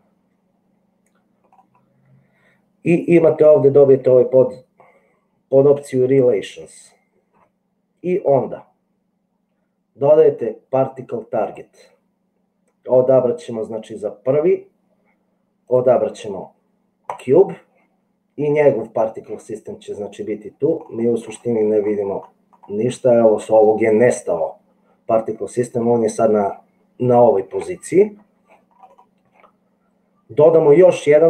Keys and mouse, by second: 6.0 click.